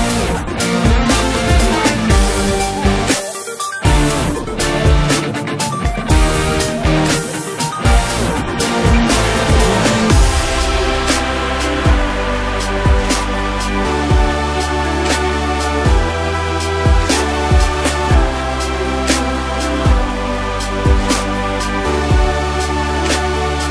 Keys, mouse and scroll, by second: 3.3 Tab, 4.6 click, 5.1-5.6 scroll down 6, 5.6-6.7 middle drag, 6.7-7.1 scroll down 2, 7.1-7.8 middle drag, 7.8 click, 9.1 click, 9.3-10.4 scroll up 8, 10.4 s, 14.2-16.1 scroll down 4, 16.1 click, 16.5 scroll down 2, 16.6-18.2 middle drag, 18.2-18.8 scroll up 1, 18.8-21.6 middle drag, 21.6-21.9 scroll down 1, 21.9-23.7 middle drag.